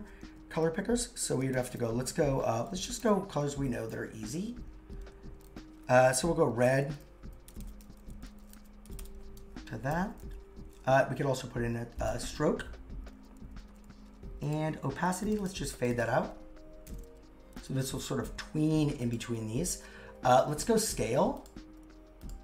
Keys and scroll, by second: 1.3 shift+3, 6.5 shift+3.